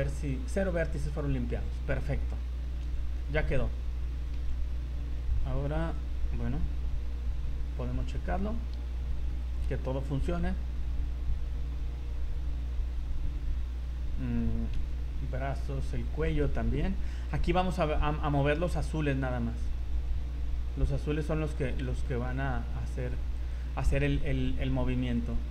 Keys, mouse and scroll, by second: 2.8 v, 3.1 middle click, 3.5 z, 4.3 KP_3, 5.8 right click, 6.6 r, 9.4 right click, 10.2 r, 14.7 KP_1, 16.3 right click, 17.1 r, 21.7 scroll up 3, 22.0 shift+middle click, 22.4 scroll up 2, 23.0 right click, 23.4 right click, 23.8 shift+middle click, 25.2 right click.